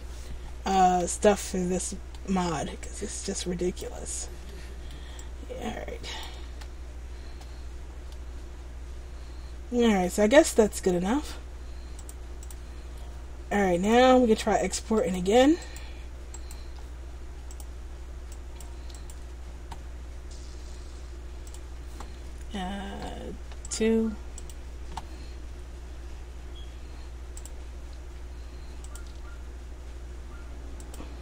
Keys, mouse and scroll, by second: 1.2 ctrl+z, 1.5-1.9 scroll up 3, 1.9 middle click, 2.6-3.0 scroll down 2, 3.0 click, 4.6 middle click, 5.3 click, 6.6 ctrl+z, 7.6-8.1 scroll down 3, 8.2 middle click, 10.5 middle click, 12.1 click, 14.0 click, 15.2 shift+right click, 15.8 right click, 17.6 click, 26.6 click.